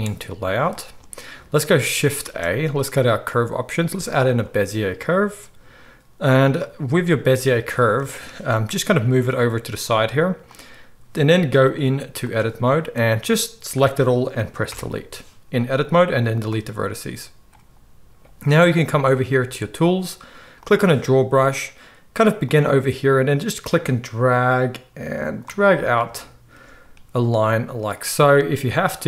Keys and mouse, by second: 0.3-11.8 shift+right drag, 2.2 shift+a, 5.2 z, 8.7 g, 14.6 Delete.